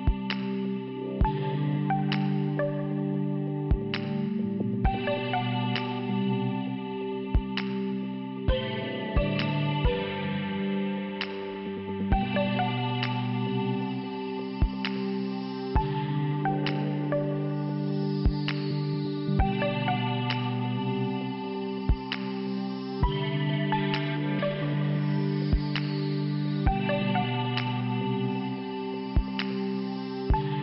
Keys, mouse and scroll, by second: 0.3 click, 0.4 click, 1.3 scroll up 1, 1.9 middle click, 3.6 click, 4.1 click, 5.5 click, 5.6 click, 7.3 click, 7.4 click, 9.2 click, 9.4 click, 10.8 click, 12.9 click, 16.2 click, 17.3 click, 17.4 click, 18.1 scroll down 1, 18.6 scroll down 1, 19.8 click, 22.5 click, 25.3 click, 26.1 click, 26.1 click, 27.1 5, 28.8 click, 28.9 click, 29.0 click, 29.5 middle click.